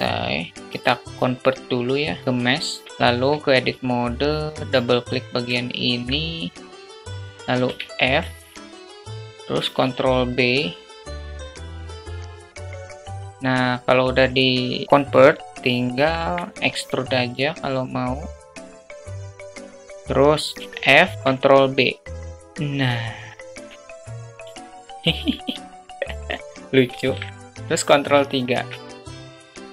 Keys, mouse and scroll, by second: 1.8-2.8 right drag, 3.6 Tab, 5.6 click, 5.8 click, 6.7 shift+middle click, 8.7 f, 9.3 alt+shift+middle click, 10.8 ctrl+b, 13.3 Tab, 13.3 ctrl+z, 17.9 e, 18.8 alt+middle click, 19.0 click, 19.4 click, 19.6 ctrl+z, 19.7 g, 21.1 f, 22.0 ctrl+b, 24.5 Tab, 25.5-26.6 alt+middle drag, 27.9 ctrl+3, 29.1 alt+shift+drag, 29.4 Tab.